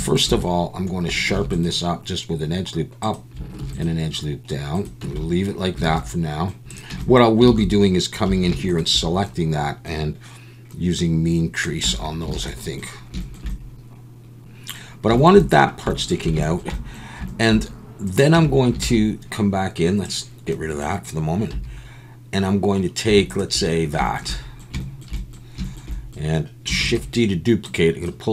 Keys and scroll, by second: 1.3 ctrl+r, 3.6 ctrl+r, 5.0 Tab, 5.9 alt+a, 6.9 Tab, 7.5 alt+a, 7.6 alt+a, 8.2 2, 11.8 Tab, 12.3 alt+a, 18.3 Tab, 18.8 alt+a, 21.5 3, 26.8 shift+d.